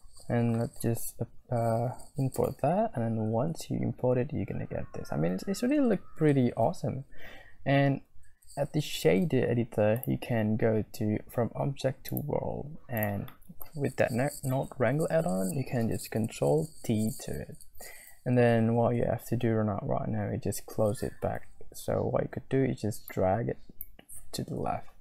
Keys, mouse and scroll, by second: 1.1 z, 10.2-12.1 scroll up 1, 12.1 click, 12.3-13.5 scroll up 1, 13.5 scroll up 1, 13.7 middle click, 14.8 middle click, 15.2-16.3 scroll up 1, 17.1 ctrl+t, 23.3 click.